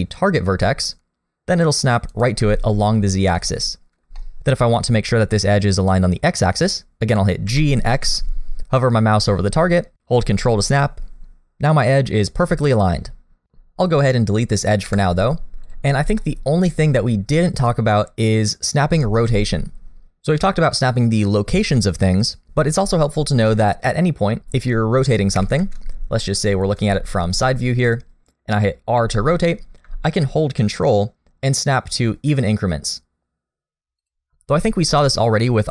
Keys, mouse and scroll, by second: 3.4 middle click, 5.3 shift+middle click, 7.4 g, 10.7 middle click, 14.9 Delete, 16.2 shift+middle click, 19.3 a, 25.4 KP_1, 26.2 shift+middle click, 26.9 shift+middle click, 29.0 r.